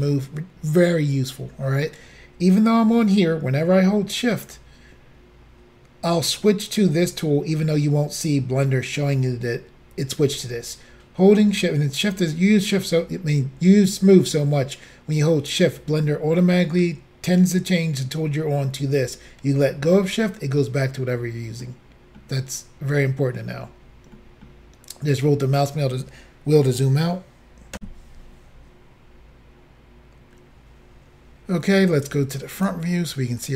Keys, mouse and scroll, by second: 21.7 middle click, 23.1-23.4 scroll down 1, 23.7 scroll down 1, 24.2 middle click, 27.8 Insert, 32.6 click.